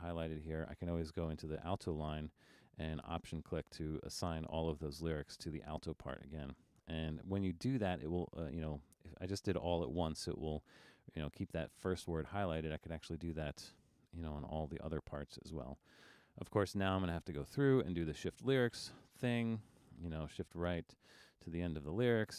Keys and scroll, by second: 0.5 super+=.